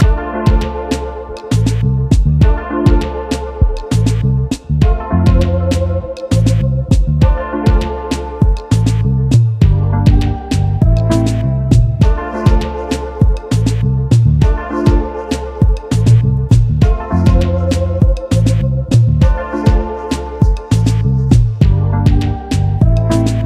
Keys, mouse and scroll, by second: 0.3 shift+click, 6.7 shift+click, 7.6 alt+scroll down 1, 8.1 space, 9.4 alt+click, 10.1 right click, 12.4 alt+scroll up 1, 13.4 shift+click, 16.0 alt+scroll down 1, 17.2-17.8 alt+scroll down 1, 18.0 alt+scroll up 1, 20.6 alt+scroll down 1, 21.7 alt+scroll up 1.